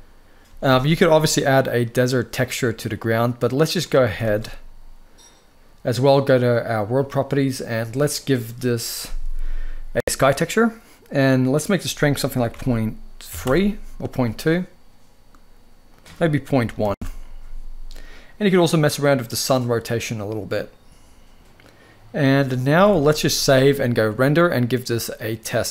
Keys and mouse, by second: 0.2 ctrl+s, 0.4 ctrl+s, 3.8 ctrl+s, 4.0 ctrl+s, 6.5 click, 7.8-9.7 drag, 11.2-13.1 drag, 15.6-16.6 drag, 18.5-21.4 drag, 21.4 z, 21.7 click, 22.5 ctrl+s, 22.6 ctrl+s, 23.9-25.7 drag.